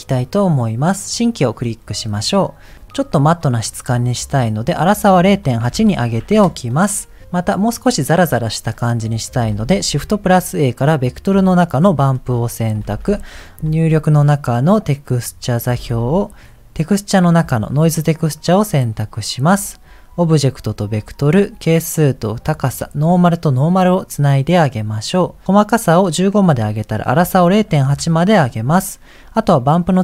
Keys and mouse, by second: 2.3 middle click, 4.6-6.3 drag, 9.6 shift+a, 12.1 middle click, 12.8 shift+a, 13.6 shift+a, 15.8 shift+a, 19.5 click, 20.6 click, 21.9-23.1 drag, 23.8 click, 25.0 click, 25.5 click, 26.4-27.9 drag, 29.6-30.0 drag.